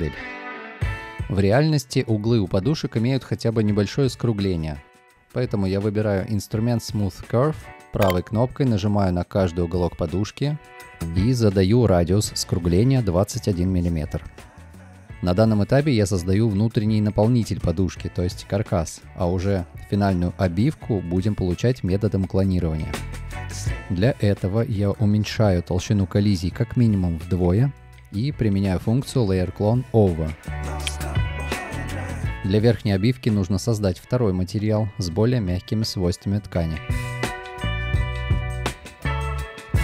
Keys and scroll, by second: 0.4 space, 1.2 space, 4.8 space, 15.7 2, 18.7 2, 20.4 2, 22.1 space, 23.8 space, 26.3 1, 27.1 2, 27.1 Return.